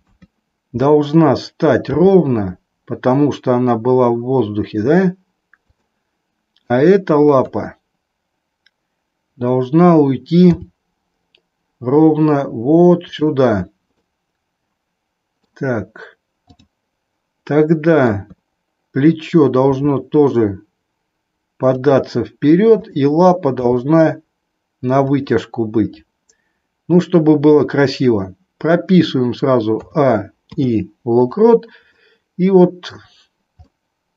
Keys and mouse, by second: 0.1 KP_3, 2.0 g, 6.6 click, 7.5 KP_3, 10.6 g, 13.1 click, 14.0-15.6 middle drag, 16.3-17.6 drag, 18.1 KP_3, 19.6 r, 21.7 click, 22.7 click, 23.9 g, 29.9 a, 30.5 i, 32.0-33.1 middle drag, 33.6 middle click.